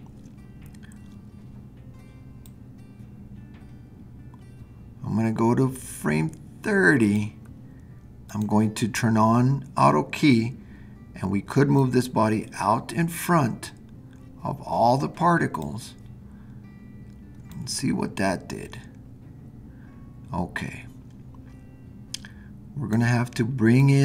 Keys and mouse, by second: 11.9-15.6 drag, 17.5-23.9 drag.